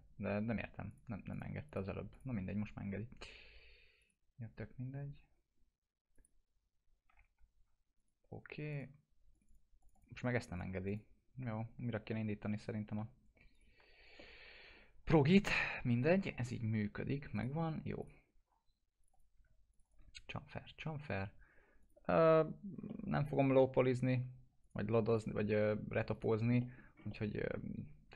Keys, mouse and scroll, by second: 2.9 scroll up 1, 4.0 click, 4.4 scroll up 1, 6.1 click, 7.2 F4, 8.0 click, 8.7 ctrl+click, 9.3 click, 11.2 scroll down 1, 12.1-13.1 alt+middle drag, 13.5 click, 13.8 alt+q, 14.2-15.7 alt+middle drag, 15.8 F4, 17.3 click, 18.4-18.9 scroll up 1, 19.4 click, 19.7 ctrl+click, 21.8 click, 22.9 alt+middle click, 24.6 click, 26.6 middle click, 26.8 scroll down 1, 27.1-28.1 alt+middle drag.